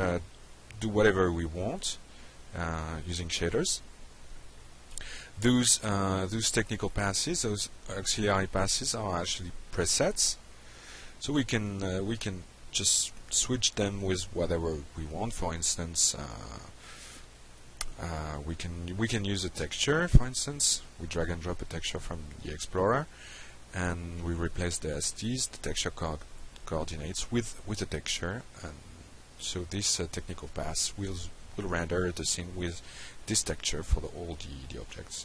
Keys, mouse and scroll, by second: 1.2-1.6 drag, 2.0 click, 3.6 click, 10.1 click, 12.8 click, 13.5 middle click, 14.6 click, 17.4 click, 18.0 Delete, 19.0 click, 19.8 BackSpace, 20.3 Delete, 21.2 alt+Tab, 23.6 shift+click, 24.7 drag, 25.4 Delete, 26.2 click, 26.9 F5, 29.4-29.7 drag.